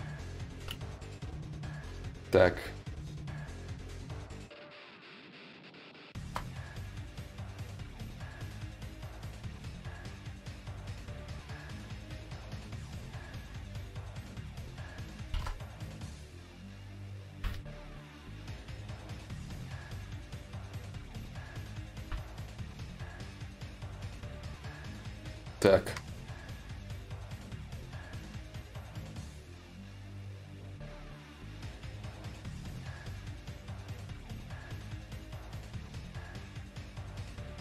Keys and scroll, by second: 0.2 ctrl+z, 37.1 ctrl+z.